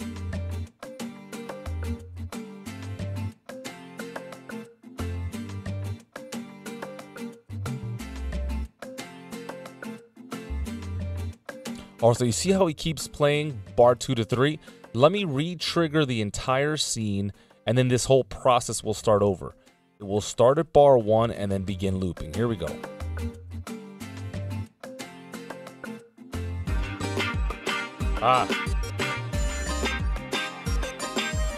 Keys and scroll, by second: 4.8 Down, 29.4 super+Return.